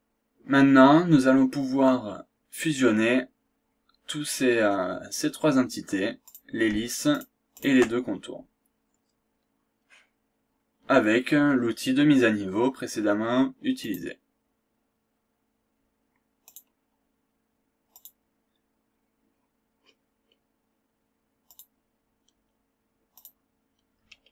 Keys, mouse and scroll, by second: 1.5 scroll up 1, 1.9-2.3 scroll down 1, 4.3-4.8 scroll up 1, 6.3 click, 7.1 ctrl+click, 13.8 click, 16.4 click, 18.0 click, 18.9-19.6 scroll up 1, 19.8-20.5 scroll down 2, 21.5 click, 23.2 click.